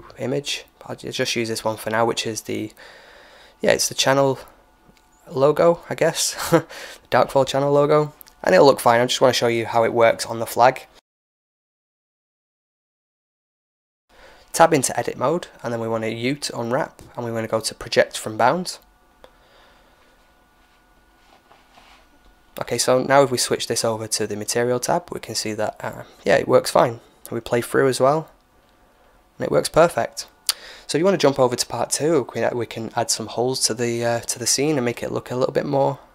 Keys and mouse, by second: 0.0-1.5 drag, 3.7-5.5 drag, 6.4-11.4 middle drag, 11.4-14.1 drag, 14.3 Tab, 16.1 u, 20.2 Tab, 22.6-26.6 drag, 26.6-28.5 middle drag, 28.5-30.3 drag, 35.7 click.